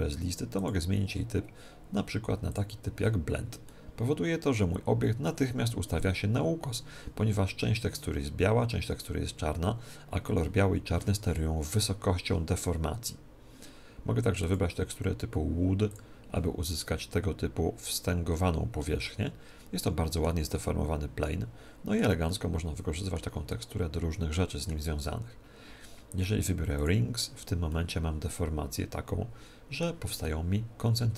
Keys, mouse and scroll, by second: 3.6-5.4 middle drag, 14.3-16.2 drag, 16.7-18.5 middle drag, 20.5-25.2 middle drag, 26.8-28.5 drag, 27.7-29.5 middle drag, 30.2-31.1 middle drag.